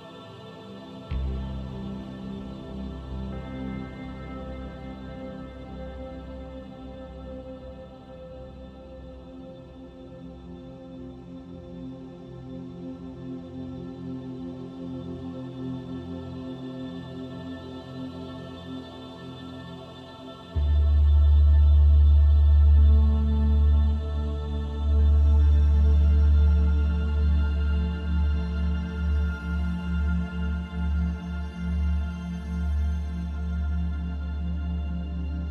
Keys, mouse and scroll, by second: 3.8 click, 13.8 click, 17.8 click, 23.4 middle click, 28.5 middle click, 32.8 click, 33.6 Tab, 34.4 shift+middle click, 35.0 middle click.